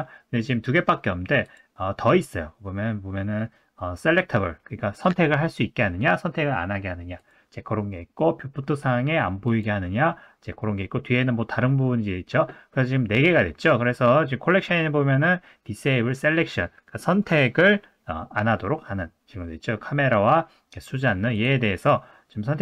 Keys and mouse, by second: 1.4-11.2 drag.